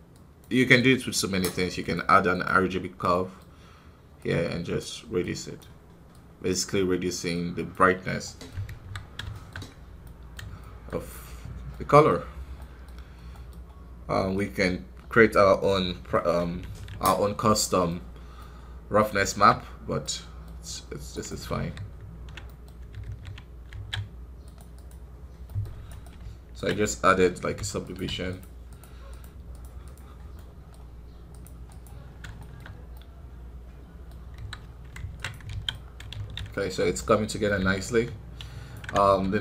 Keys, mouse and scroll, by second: 3.0-5.5 middle drag, 5.5-8.2 drag, 8.2 middle click, 8.6 KP_1, 8.9 scroll down 1, 9.2 shift+middle click, 9.5 scroll up 4, 9.9-11.5 middle drag, 11.5 scroll down 1, 11.6-14.3 middle drag, 14.3-15.7 drag, 15.7-16.0 scroll down 3, 16.0-17.8 middle drag, 17.8 scroll up 4, 18.3-20.6 middle drag, 20.6-21.0 scroll down 2, 21.0-22.4 right drag, 22.4 middle click, 22.6 scroll up 3, 23.0 ctrl+d, 23.6 alt+a, 24.5 click, 25.4 middle click, 25.8 right click, 26.6 ctrl+Tab, 27.3 f, 28.0 i, 28.2-30.2 drag, 30.2 middle click, 31.2 click, 32.0 scroll down 2, 32.3-34.3 shift+middle drag, 34.3 KP_1, 34.5 scroll down 2, 35.1 ctrl+Tab, 35.4 alt+a, 35.6-37.6 middle drag, 37.6-38.9 ctrl+alt+drag, 38.9 scroll up 1, 39.1 KP_1.